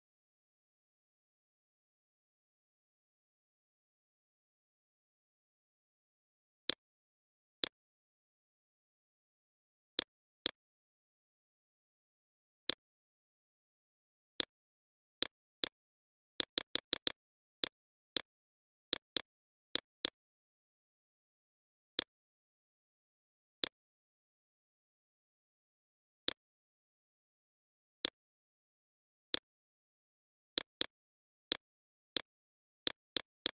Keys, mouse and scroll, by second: 3.2 right click, 4.0 click, 5.2-11.8 drag, 12.0 ctrl+z, 12.2 click, 13.2 shift+click, 14.4 click, 15.4-18.3 drag, 19.5 click, 23.1 ctrl+z, 23.5 click, 24.3 right click, 25.0 click, 27.2 BackSpace, 27.7-33.5 drag.